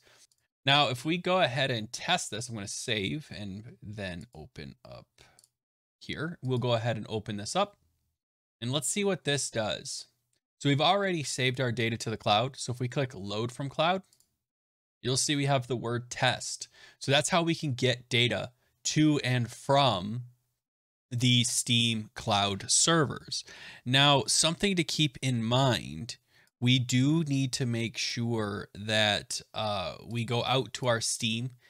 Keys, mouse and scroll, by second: 0.2 click, 0.3 click, 1.2 ctrl+s, 3.8 BackSpace, 4.2 click, 6.2 click, 6.5 click, 12.2 click, 14.1 click, 24.9 click, 26.4 click, 28.0 click, 31.4 click.